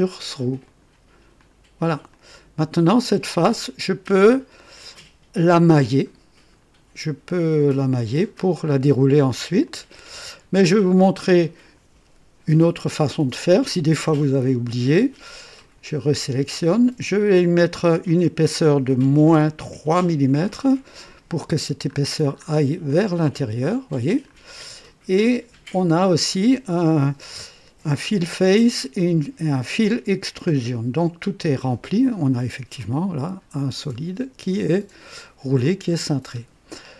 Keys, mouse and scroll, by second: 0.6 click, 1.4 click, 2.1-4.5 drag, 4.9 right click, 5.7-7.5 drag, 7.8-8.8 drag, 9.6-11.9 drag, 15.5 click, 18.2 click, 19.3 KP_Subtract, 19.9 KP_3, 20.4 KP_Enter, 21.8-22.7 scroll up 2, 22.9-24.4 drag, 25.7 click, 32.0 click, 32.8-35.8 drag, 35.8-36.4 scroll down 3, 36.7-36.9 drag.